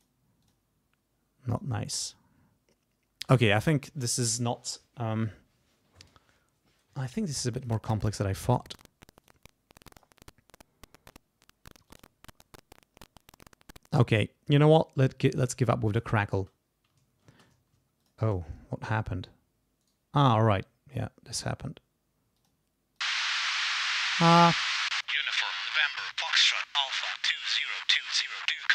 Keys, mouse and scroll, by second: 0.0 click, 0.4 click, 1.5 click, 7.6 click, 9.2 click, 11.9 click, 14.1 click, 14.7 click, 15.9 click, 16.4 space, 17.3 ctrl+space, 18.0 ctrl+click, 19.8 right click, 24.9 space, 26.1 ctrl+scroll down 2.